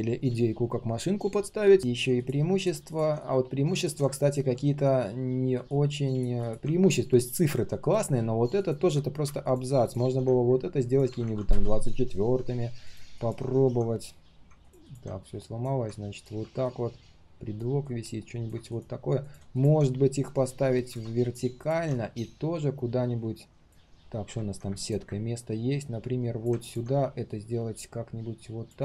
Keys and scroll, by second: 24.0 ctrl+shift+4.